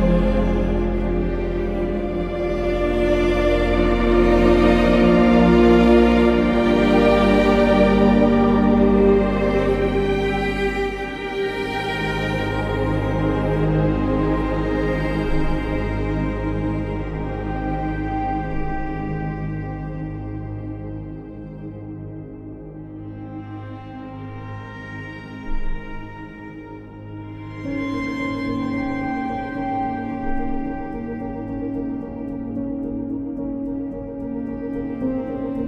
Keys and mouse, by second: 0.1 g, 0.3 g, 0.8 Escape, 1.3 g, 1.6 z, 3.7 g, 4.0 z, 7.1 ctrl+r, 7.4 click, 7.9 click, 8.1 2, 9.3 e, 9.7 z, 11.9 1, 12.4 alt+z, 12.8 ctrl+click, 13.6 g, 13.9 g, 16.5 g, 16.7 y, 18.1 click, 18.8 ctrl+r, 19.1 click, 19.5 1, 21.5 g, 21.7 y, 22.5 click, 23.4 click, 24.6 ctrl+r, 25.0 click, 26.8 g, 27.1 z, 27.7 click, 28.2 g, 28.4 y, 28.8 click, 29.3 g, 29.6 z, 31.1 click, 33.3 ctrl+r, 33.7 click, 35.1 click.